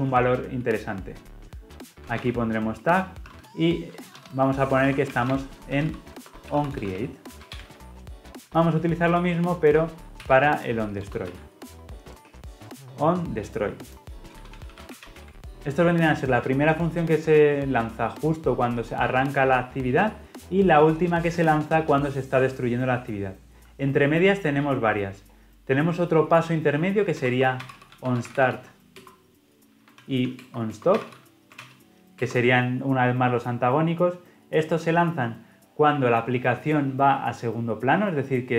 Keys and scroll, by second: 10.2 ctrl+c, 11.2 ctrl+v.